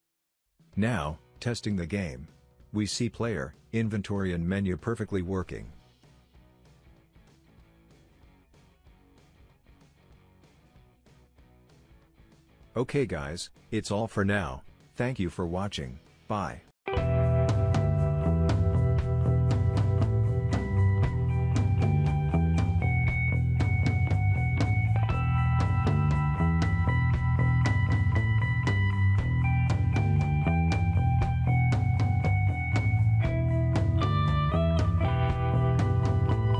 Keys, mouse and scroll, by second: 3.3 w, 7.5 Tab, 9.4-10.5 drag, 11.2 click, 11.6 Tab, 16.2 right click.